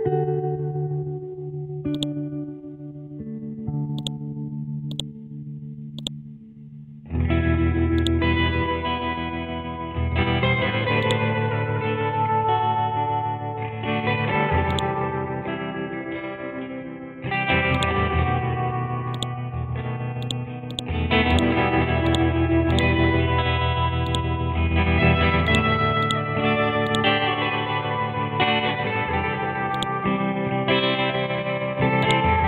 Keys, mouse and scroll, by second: 0.2 ctrl+x, 0.7-1.4 scroll down 1, 1.4 scroll up 1, 2.0 click, 2.3 ctrl+v, 4.0-9.7 drag, 9.7-10.2 scroll down 1, 10.2 scroll up 1, 11.0 click, 13.4 scroll down 1, 14.7-17.8 drag, 22.5 c, 22.7 click, 28.2-29.8 scroll up 1, 29.8-31.4 drag, 31.4-32.0 scroll down 1, 32.0 click.